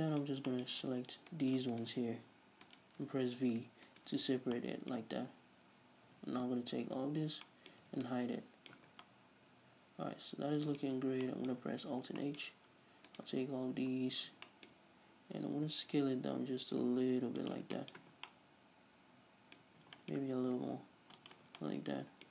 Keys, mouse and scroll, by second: 1.3 alt+right click, 1.8 alt+shift+right click, 2.7 alt+shift+right click, 3.6 v, 4.0 right click, 4.6-13.1 middle drag, 6.1 a, 7.0 l, 7.9 h, 8.8 Tab, 8.9 scroll down 1, 10.9 Tab, 11.0 scroll up 2, 12.0 alt+h, 12.6-13.1 scroll up 2, 13.1 right click, 13.9 l, 14.5-16.1 shift+middle drag, 15.5 s, 17.5 shift+click, 17.7-18.2 middle drag, 18.0 Tab, 18.2 scroll down 1, 19.9 Tab, 19.9-22.3 middle drag, 20.4 s, 21.3 shift+click, 21.5 Tab.